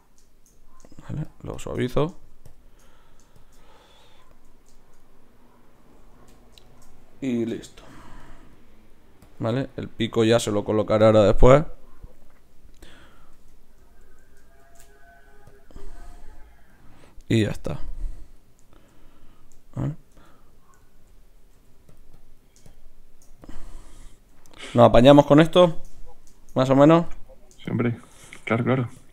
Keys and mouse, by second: 4.3 z, 6.3 KP_3, 7.5 k, 7.9 f, 8.5-12.5 drag, 12.4-13.4 middle drag, 12.4 right click, 13.4 Tab, 14.6 ctrl+shift+c, 17.4 middle click, 17.9-19.9 drag, 20.1 Tab, 21.5 f, 22.1-25.1 drag, 24.1 right click, 24.4-25.4 right drag, 27.1-29.1 drag, 27.1-29.1 right drag.